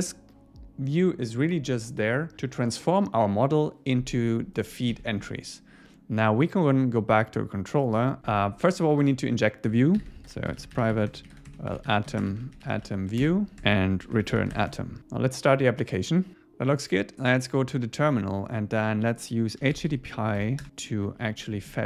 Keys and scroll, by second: 4.9 super+s, 8.2 Up, 8.3 Escape, 13.2 Return, 14.6 Escape, 15.0 super+s, 21.1 Right, 21.4 Left.